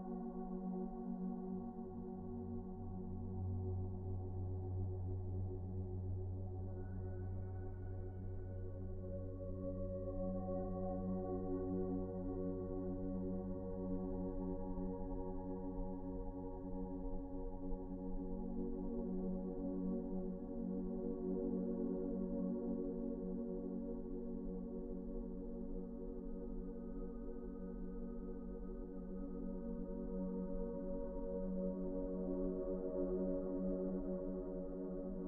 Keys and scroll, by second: 3.3 p, 9.4-10.2 typing, 13.3 ctrl+z, 16.2-17.0 typing, 19.0 p, 19.5 f, 24.5 Delete, 26.7 ctrl+z, 31.1 t, 33.6 f.